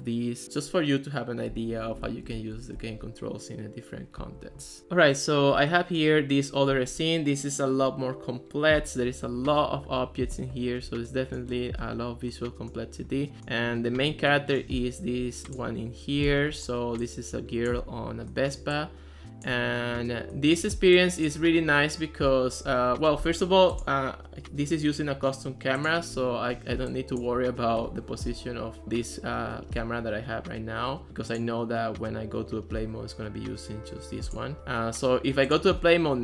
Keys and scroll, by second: 2.0 d, 2.3 w, 16.3 s.